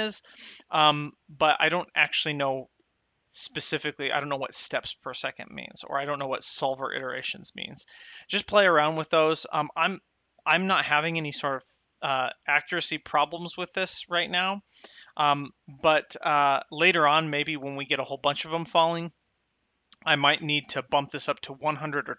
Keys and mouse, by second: 12.5 space, 15.1 space.